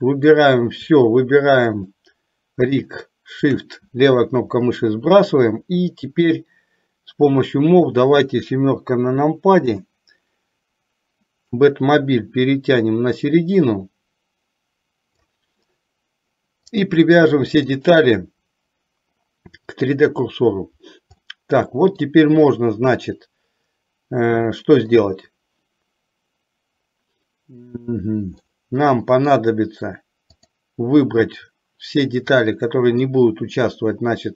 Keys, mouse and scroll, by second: 0.0 click, 1.9 shift+click, 2.8 shift+click, 9.8 KP_7, 11.7-15.4 drag, 16.7-20.3 drag, 21.5 middle click, 24.6 shift+middle click, 28.6-29.6 middle drag, 30.5 click, 32.6 click.